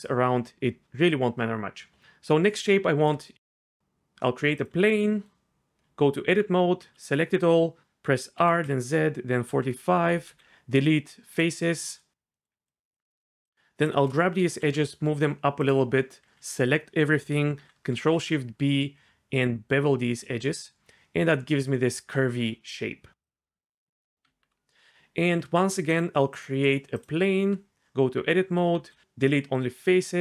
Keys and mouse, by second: 0.0-0.2 typing, 0.6 click, 2.9 shift+a, 5.8 Tab, 6.8-10.3 typing, 7.8 KP_Enter, 7.8 ctrl+z, 9.6 KP_Enter, 12.3 click, 14.5 g, 14.7 z, 15.6 click, 16.2 a, 17.9 ctrl+shift+b, 24.2 Tab, 25.2 shift+a, 27.5 Tab, 28.4 a, 28.8 x.